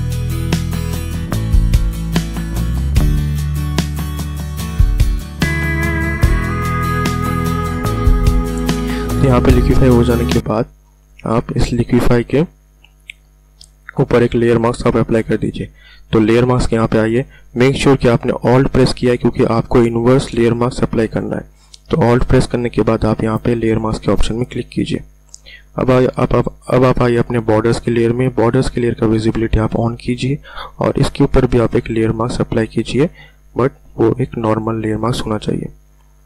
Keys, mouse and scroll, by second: 24.3 alt+click, 27.3 click, 29.8 click, 33.1 click.